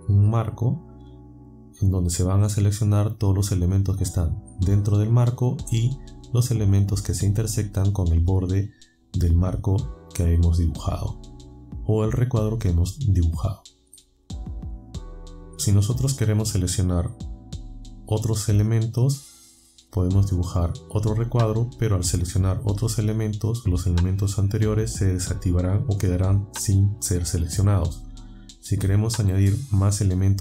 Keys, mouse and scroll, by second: 0.2-14.0 drag, 15.6-21.3 drag.